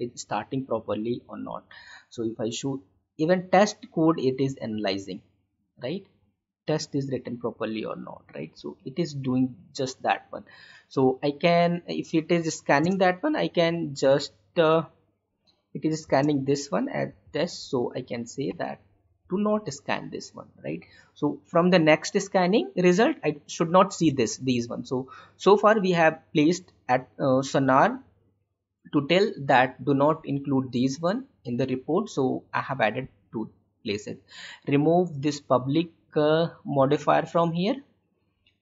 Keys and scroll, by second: 12.7 space, 15.3 Up, 15.9 space, 24.2 alt+Tab.